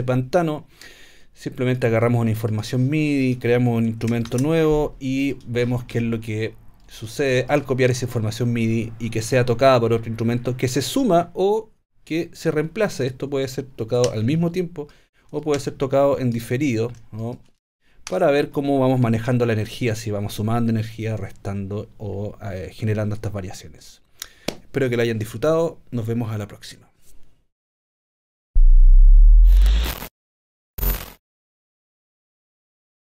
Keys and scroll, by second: 4.3 shift+super+t, 18.1 BackSpace.